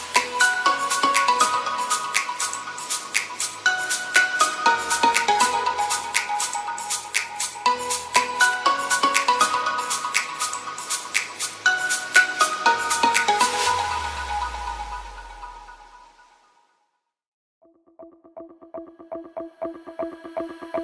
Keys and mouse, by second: 9.9 Tab, 10.2 a, 10.6 a, 11.3 ctrl+t, 12.6 Tab, 14.4-15.8 drag, 18.3 ctrl+s.